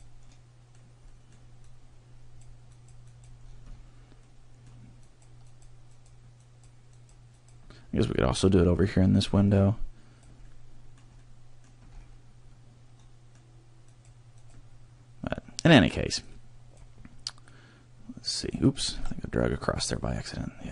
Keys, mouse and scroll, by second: 0.4 middle click, 1.0 middle click, 1.6 click, 2.8 click, 3.2 click, 3.5-4.0 scroll down 4, 4.2 middle click, 5.0 click, 5.6 click, 6.0 click, 6.4 click, 7.0 click, 7.4 click, 8.3 scroll down 3, 9.5 click, 12.3 click, 12.3 middle click, 12.3 scroll, 12.9 middle click, 14.0 click, 15.2 m, 20.6 click.